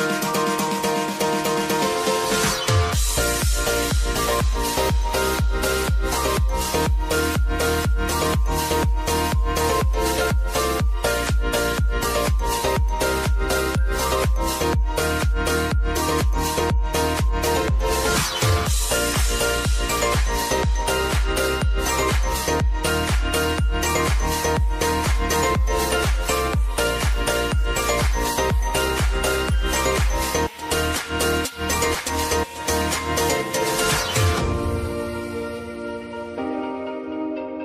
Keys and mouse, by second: 3.0 space, 6.2 click, 7.3 Return, 8.5 click, 9.3 v, 10.1 click, 13.1 click, 15.0 Return, 15.7 click, 16.5-17.4 typing, 19.4 click, 20.7 space, 22.0 click, 22.8 v, 23.5 click, 28.0-29.9 drag, 29.9 Return, 30.3 click, 30.7 space, 32.9 click, 33.7 u, 34.9 space, 36.2 click, 37.0 =.